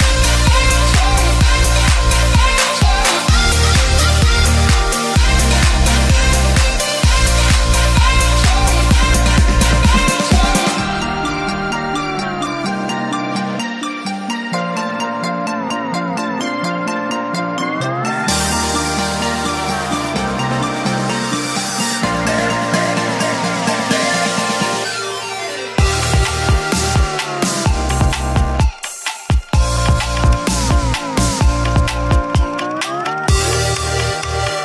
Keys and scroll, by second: 6.2 ctrl+u, 18.9 ctrl+t.